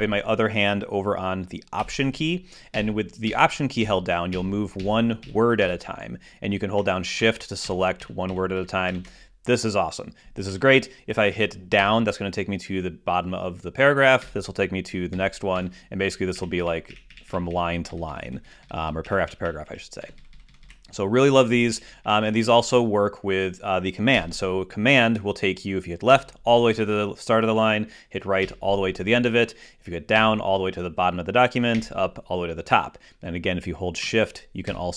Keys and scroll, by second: 3.5 alt+Right, 8.0 alt+shift+Left, 12.2 alt+Left, 12.6 alt+Down, 15.0 alt+Down, 26.9 super+Left, 29.3 super+Right, 31.0 super+Down, 32.6 super+Up.